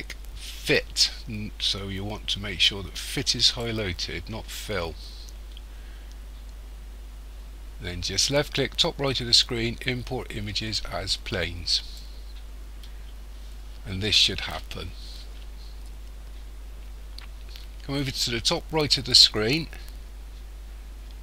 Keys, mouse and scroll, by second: 12.0 click.